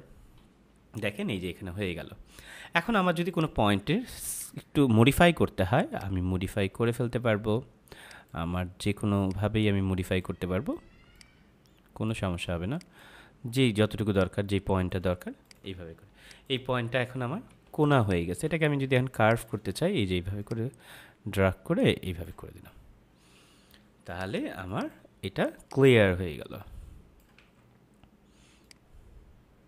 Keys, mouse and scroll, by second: 0.0 F5, 3.2 click, 17.9 space, 28.6 click.